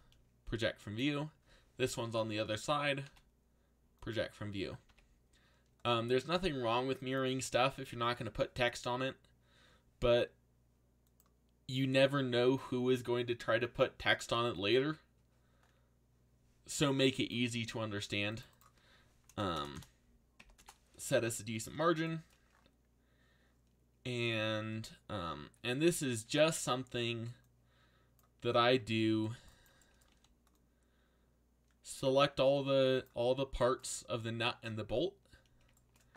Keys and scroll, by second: 3.0 u, 4.9 a, 19.5 BackSpace, 19.7 BackSpace, 20.3 2, 20.5 Return, 26.3 c, 30.1 c.